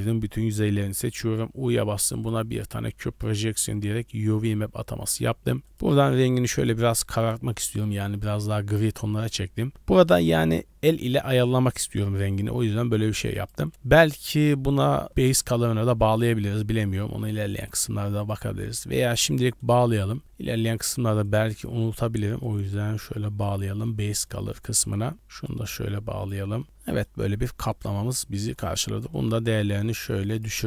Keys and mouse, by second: 1.4 u, 2.8 Tab, 5.2 click, 5.7 drag, 8.1-8.4 middle drag, 8.9-9.4 shift+middle drag, 11.0 middle click, 11.8 middle click, 12.3 middle click, 13.5-15.3 drag, 17.1 click, 17.6 click, 18.2 click, 18.6 click, 19.0 shift+d, 22.5-23.5 drag, 24.3 middle click, 25.1-26.3 drag, 26.8 middle drag, 27.6 middle click, 29.1 click, 30.2-30.6 drag.